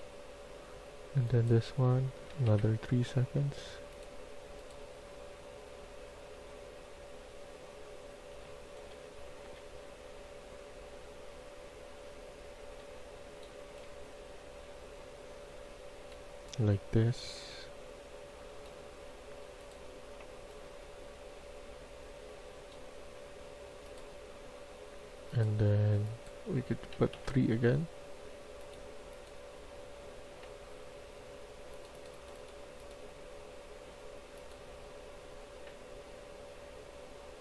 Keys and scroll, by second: 2.2 3, 2.4 Return, 8.0-8.8 typing, 11.7-13.6 typing, 26.9 typing, 27.0 Return.